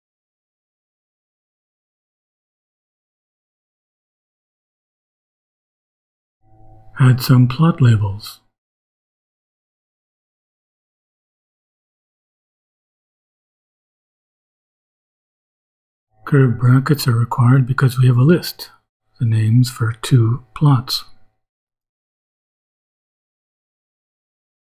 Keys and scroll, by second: 0.2 shift+Return, 4.8 ,, 6.1 Return, 7.2-11.0 typing, 14.4 shift+[, 15.2 shift+], 17.0 Left, 18.7-24.7 typing.